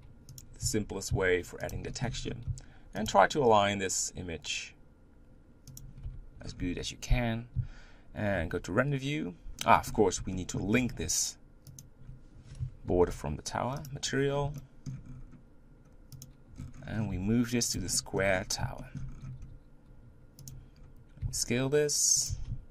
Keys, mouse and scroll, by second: 0.6 a, 1.1 s, 3.0 g, 6.1 Tab, 6.4 scroll up 2, 6.6 z, 8.6 z, 9.6-10.4 scroll down 10, 10.4 shift+middle click, 10.7-11.5 scroll up 6, 11.8 shift+click, 14.0 ctrl+l, 14.2-14.6 scroll down 4, 14.6 shift+middle click, 15.0 scroll up 6, 16.2 click, 16.5-17.1 scroll down 10, 17.1 g, 17.9 shift+middle click, 18.3-18.8 scroll up 6, 18.8 shift+middle click, 19.1 scroll up 1, 19.4 g, 20.8-21.2 scroll up 2, 21.4 s, 22.3 g.